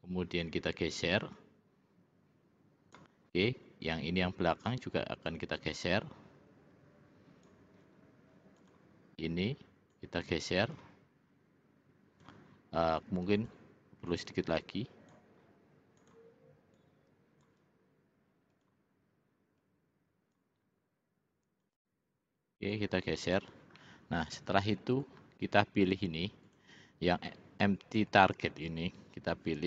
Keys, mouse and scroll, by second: 0.4 click, 1.6-3.2 drag, 3.9 click, 5.4-7.6 drag, 8.6 click, 10.0-12.4 drag, 13.5 click, 14.3 click, 16.0 click, 16.8 click, 18.6 click, 19.6 click, 21.7 click, 22.8 click, 23.9-25.1 middle drag, 26.6 click, 27.4-28.5 middle drag.